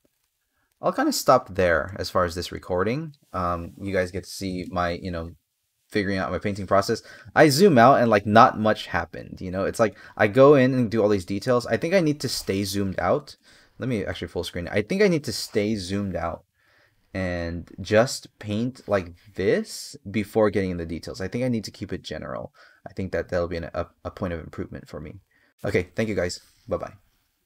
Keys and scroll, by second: 2.3 space.